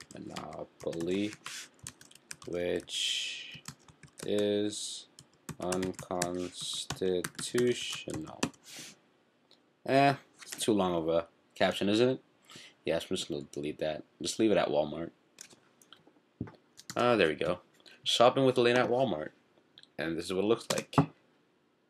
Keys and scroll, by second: 0.0-9.0 typing.